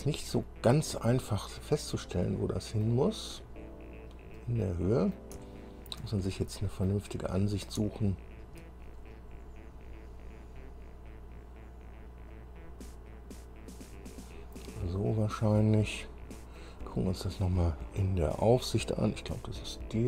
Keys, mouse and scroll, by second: 0.8-1.6 scroll down 4, 1.8-3.2 drag, 3.5-4.1 scroll up 4, 4.5 click, 5.6 shift+middle click, 6.4 shift+middle click, 7.5 scroll down 2, 8.0 shift+middle click, 9.2 shift+scroll up 3, 12.5-14.2 drag, 14.7 scroll down 2, 16.1 click, 17.0-17.3 scroll down 2, 18.8 click, 19.5 KP_1.